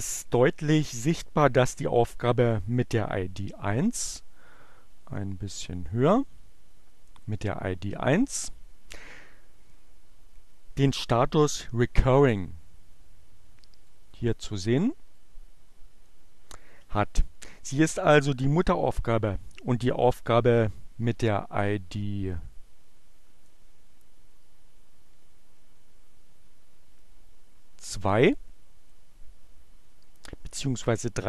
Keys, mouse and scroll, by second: 4.5-7.1 drag, 13.8 click, 14.3-16.0 drag, 23.6-28.9 drag.